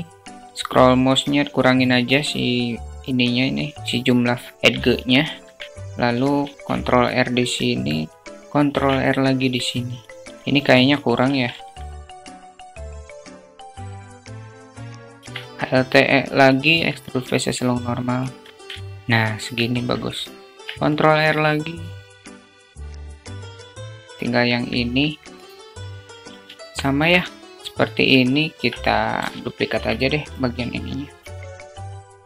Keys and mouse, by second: 4.5 middle click, 4.8 Tab, 5.5 middle click, 5.7 ctrl+Tab, 5.8 ctrl+r, 9.4 Tab, 9.9 middle click, 10.7 ctrl+z, 11.9 Tab, 12.3 click, 12.3 3, 14.5 ctrl+alt+shift+middle click, 15.0 ctrl+alt+shift+e, 17.7 Tab, 18.1 alt+middle click, 19.0 middle click, 19.1 Tab, 20.2 ctrl+r, 22.1 ctrl+r, 22.9 Tab, 23.5 /, 24.1 Tab, 24.8-25.8 drag, 26.0 alt+shift+click, 27.9 Tab, 29.1 Delete, 29.6 click, 31.0 shift+d.